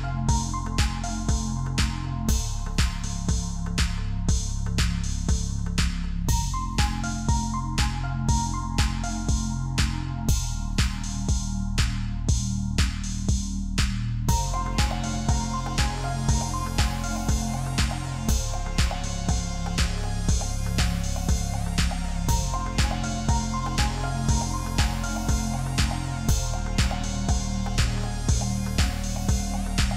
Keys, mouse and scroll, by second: 1.1 Down, 1.3 Down, 1.8 Up, 2.1-4.4 Up, 4.4 Return, 5.4 double click, 5.9 scroll up 1, 9.0 ctrl+click, 14.4 ctrl+d, 14.8 alt+scroll down 1, 17.5 alt+scroll up 1, 18.6 shift+click, 21.2 double click, 21.8 alt+scroll down 1, 23.4 ctrl+alt+shift+e.